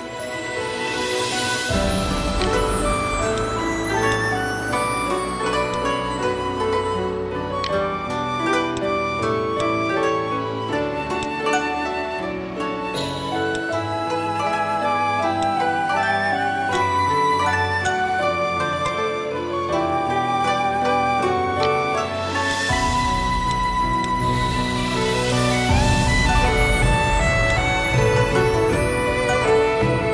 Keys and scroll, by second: 5.5 v, 13.4 v, 25.5 v, 27.7 Delete.